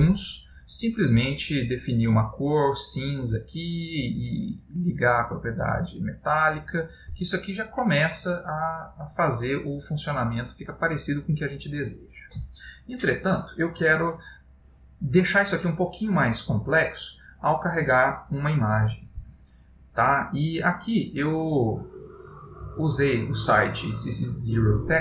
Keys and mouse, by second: 1.3 click, 4.1 click, 7.5 middle click.